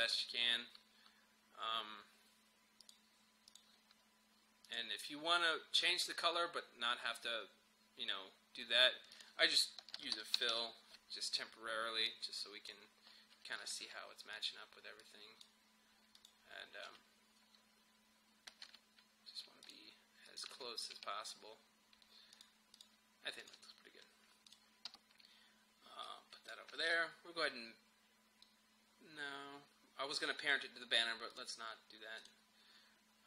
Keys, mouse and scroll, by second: 2.9 click, 9.2 click, 10.0 f, 12.1-16.2 drag, 16.9 Up, 17.6-18.7 scroll up 1, 18.7 Up, 19.7 click, 20.5 Up, 22.4 click, 24.9 u, 26.1-29.1 drag, 31.3 click.